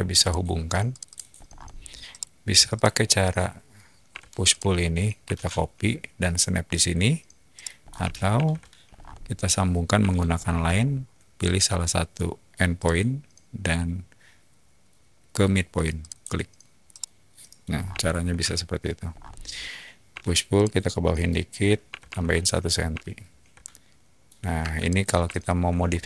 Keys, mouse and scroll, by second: 0.2 click, 0.9 click, 1.1 click, 1.3 scroll up 1, 2.1-2.5 middle drag, 2.7 click, 4.1 p, 4.5 click, 6.7 ctrl+click, 7.5 middle click, 7.8 scroll up 2, 8.8 ctrl+z, 8.8 scroll up 2, 9.9 scroll, 9.9 l, 10.3 middle click, 12.7 click, 12.8-14.3 typing, 16.0 click, 16.9 middle click, 17.7 middle click, 17.7 scroll down 2, 17.9 shift+middle click, 19.1 middle click, 19.1 scroll down 1, 19.1 scroll, 20.1 p, 20.5 click, 21.8 1, 22.0 Return, 23.0-24.1 shift+middle drag, 24.5 space, 24.8 click, 25.2-25.6 shift+middle drag, 25.8 scroll down 2.